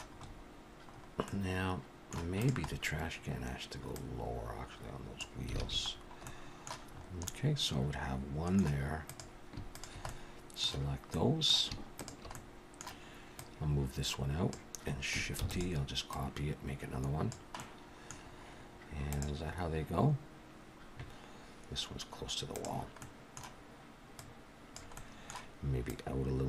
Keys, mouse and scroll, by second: 0.1-0.9 scroll up 4, 1.2 middle click, 1.2-1.7 scroll up 3, 2.4 click, 2.7-4.0 scroll down 2, 4.0 click, 4.0 scroll down 1, 5.6 alt+a, 6.2 middle click, 6.2-6.9 scroll down 1, 6.9-7.7 scroll up 4, 7.3 middle click, 9.0 click, 9.7 shift+click, 10.1 middle click, 11.1 middle click, 12.0 shift+click, 12.3 middle click, 13.4 click, 15.4 shift+d, 16.1 click, 17.6 middle click, 18.2-19.1 scroll down 3, 23.0 middle click, 24.2 click, 24.9 middle click, 25.9 click.